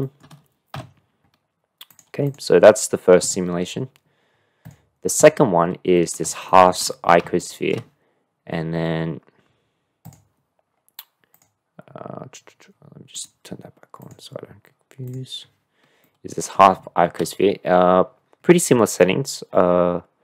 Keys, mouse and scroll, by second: 0.0 shift+middle click, 0.8 n, 2.4 click, 4.6 click, 5.2-6.0 drag, 6.0 middle click, 6.5 shift+middle click, 7.3-7.7 shift+middle drag, 10.0 click, 11.3 click, 13.1 click, 15.1 click, 16.0-16.5 middle drag.